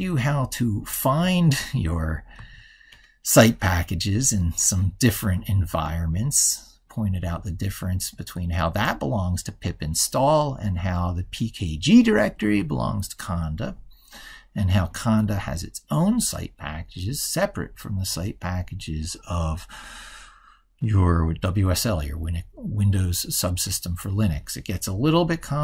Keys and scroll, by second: 1.4 ctrl+super+Left.